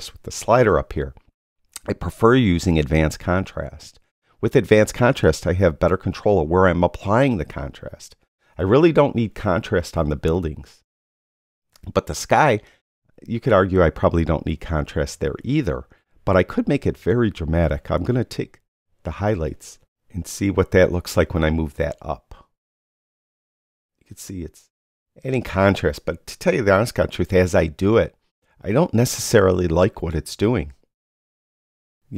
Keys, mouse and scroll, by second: 2.9 click.